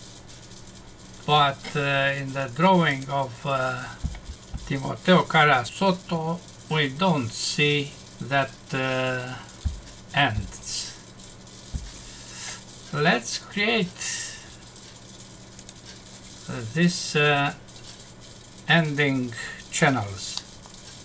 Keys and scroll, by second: 20.3 F6.